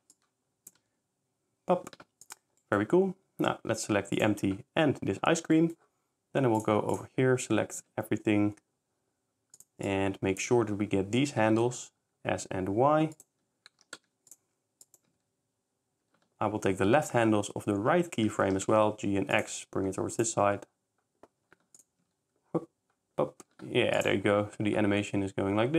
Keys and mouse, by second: 0.1 click, 2.3 click, 3.7 shift+s, 5.6 middle click, 6.6 click, 6.9 click, 7.8 a, 9.6 click, 9.9 click, 11.4 s, 11.7 y, 13.8 g, 14.0 x, 14.9 click, 18.5 g, 18.7 x, 20.2 click, 21.8 shift+click, 24.0 shift+click, 24.2 shift+s.